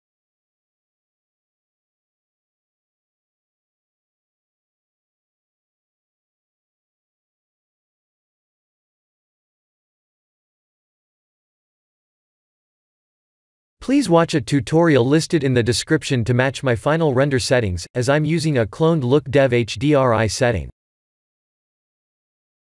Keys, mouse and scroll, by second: 0.4-1.3 scroll up 6, 1.3 click, 1.3-1.8 scroll up 1, 1.8 right click, 3.8 middle click, 8.8 click, 9.5 click, 11.0 click, 11.9 click, 12.1 click, 13.3-14.9 scroll down 5, 14.9 click, 15.4 click, 17.7 click, 20.7 click.